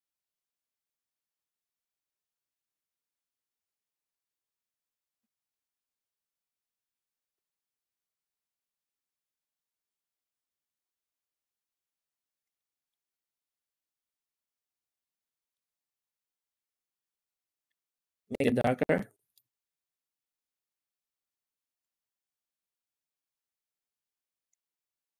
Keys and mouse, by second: 0.2 z, 5.9-8.5 drag, 11.7 alt+shift+z, 12.1 alt+shift+z, 12.4 middle drag, 12.7 middle click, 15.1-15.4 middle drag, 18.3 click, 19.3-21.6 drag, 22.0 middle drag, 23.9-24.4 shift+middle drag.